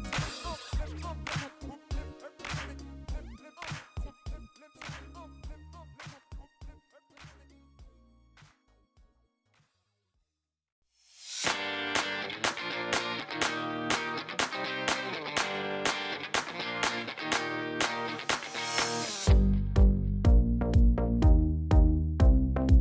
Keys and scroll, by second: 5.0 2, 7.4 ctrl+b, 17.3 ctrl++.